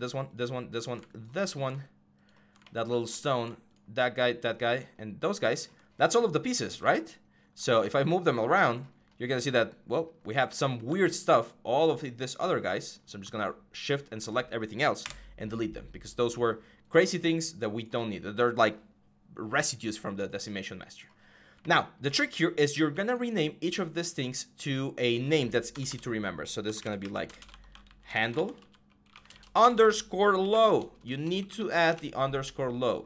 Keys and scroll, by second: 7.6 w, 10.7 ctrl+z, 14.8 Delete, 25.5-32.2 typing.